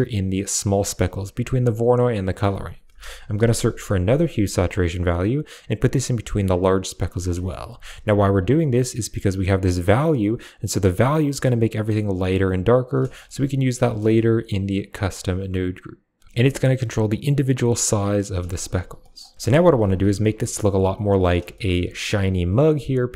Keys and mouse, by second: 0.4 click, 0.7 click, 1.3 click, 1.9 click, 2.9 shift+a, 5.4 shift+a, 6.4 click, 6.8 click, 7.2 middle click, 9.2-12.7 shift+drag, 13.1 middle click, 14.1-16.0 shift+drag, 16.3-18.0 shift+drag, 18.9 middle click, 19.2 middle click, 20.3 click, 21.4 shift+middle click.